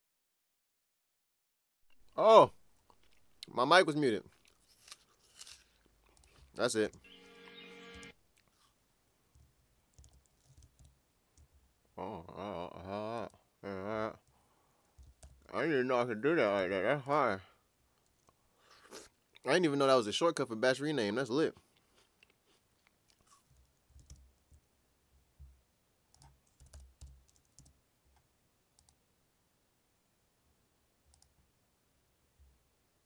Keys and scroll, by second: 6.9 typing, 7.9 typing, 10.0 super+s, 10.8 ctrl+shift+r, 15.2 ctrl+shift+r, 24.1 alt+super+b, 26.6 BackSpace, 26.7 BackSpace, 27.0 BackSpace, 27.6 1.